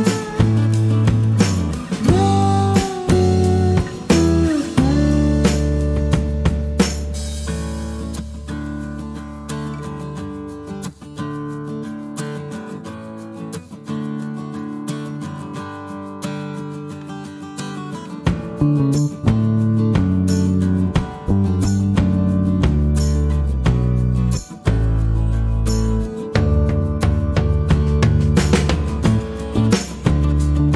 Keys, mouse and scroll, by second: 0.4-1.6 drag, 1.8 click, 3.4-5.3 drag, 8.0 click, 9.2-11.0 drag, 12.1 click, 13.2 click, 16.6-18.0 drag, 22.6 shift+click, 26.6 click, 30.0 click.